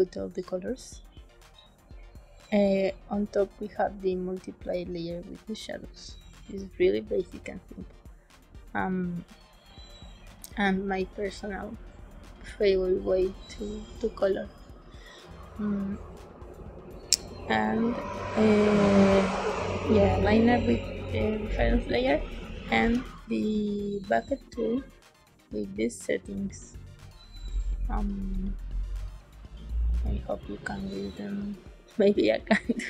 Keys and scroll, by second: 22.7 g.